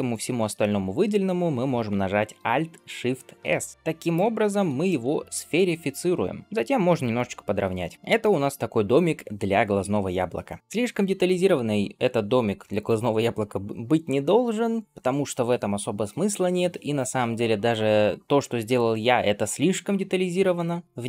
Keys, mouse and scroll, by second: 0.9-1.3 scroll up 2, 3.2 alt+shift+s, 4.7 shift+middle click, 5.1-6.4 middle drag, 6.7 s, 7.9 shift+middle click, 7.9 scroll up 1, 10.6-11.5 middle drag, 10.6-10.9 scroll up 2, 20.7-21.0 middle drag.